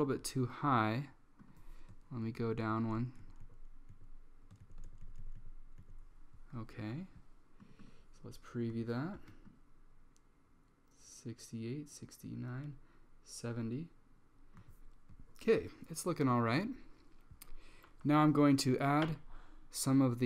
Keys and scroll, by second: 2.3 Page_Down, 3.0 Page_Down, 4.0 Page_Down, 4.7 Page_Down, 5.1 Page_Down, 5.6 Down.